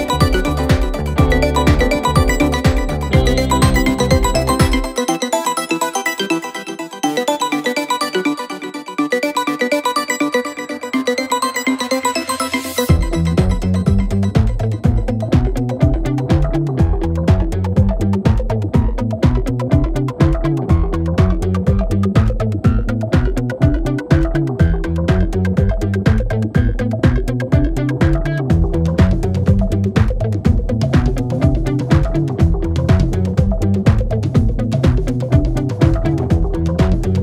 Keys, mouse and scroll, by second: 13.2 space, 13.4-14.0 click, 13.8 space, 14.0 click, 16.3-17.5 alt+drag, 18.6 alt+scroll up 1, 19.3 space, 19.7-20.3 click, 19.8 space, 20.4-31.8 drag, 27.0-31.3 drag, 32.0-32.4 click, 35.2 right click, 36.0 click, 36.2 right click.